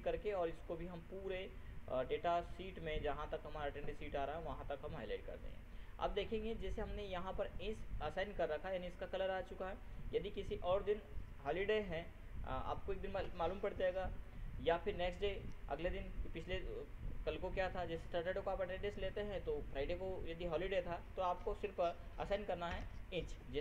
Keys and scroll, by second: 22.6 ctrl+h, 23.4 ctrl+Return.